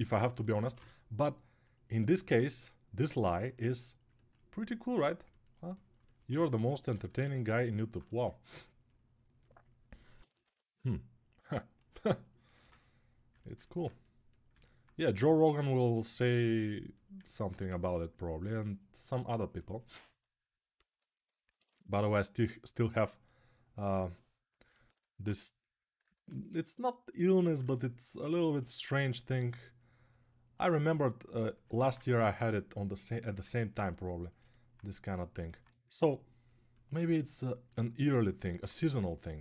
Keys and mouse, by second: 0.0-0.5 typing, 3.8-6.3 ctrl+alt+right drag, 6.7 alt+q, 7.9 1, 10.2 g, 16.9-24.6 ctrl+drag, 17.4 1, 24.6-31.7 ctrl+alt+right drag, 28.7 1, 35.7-39.4 right drag.